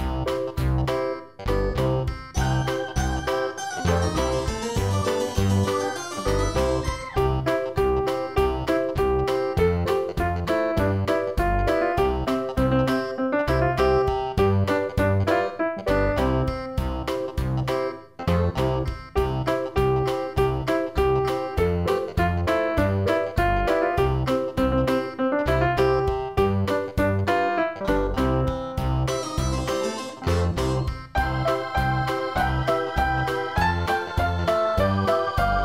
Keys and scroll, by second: 16.1 ctrl+i.